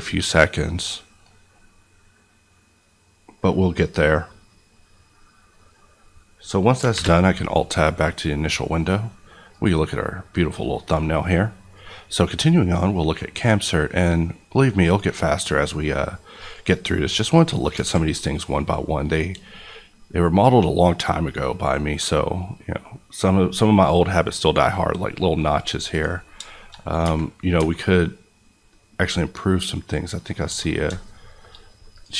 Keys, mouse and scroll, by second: 6.8 alt+click, 6.9 alt+Tab, 9.5 click, 12.0-13.9 drag, 17.3 middle click, 17.8 alt+a, 18.1 middle click, 18.3-19.1 scroll up 1, 19.1 scroll up 1, 19.8 middle click, 25.4 scroll up 1, 25.9 click, 26.2 scroll down 2, 26.4 shift+middle click, 27.0 Tab, 28.2-28.8 scroll up 1, 28.8 scroll down 1, 29.0-30.4 middle drag, 30.4 Tab, 30.9 shift+middle click, 31.9 click.